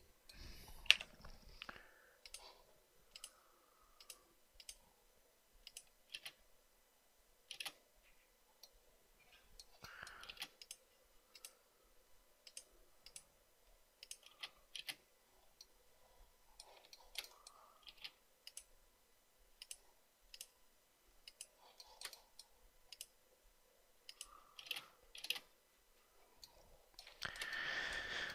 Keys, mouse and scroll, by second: 1.2 Delete, 6.4 space, 8.0 space, 10.6 space, 14.6 space, 15.1 space, 17.3 shift+right click, 18.2 space, 22.2 shift+right click, 24.8 space, 25.5 space, 27.6 shift+right click.